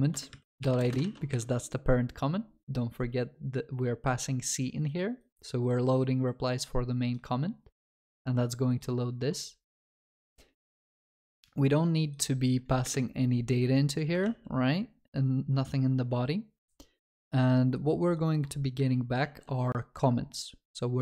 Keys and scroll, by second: 1.1 ctrl+s, 11.4 ctrl+s, 14.3 ctrl+s, 19.3 ctrl+s.